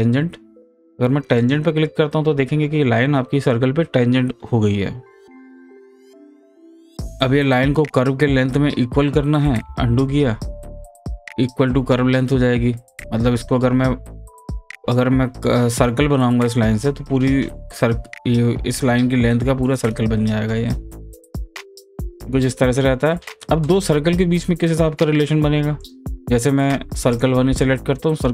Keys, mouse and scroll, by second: 1.4 click, 9.4 click, 9.6 ctrl+z, 11.0 click, 20.8 click, 21.4 ctrl+z, 22.4 click, 25.8 click.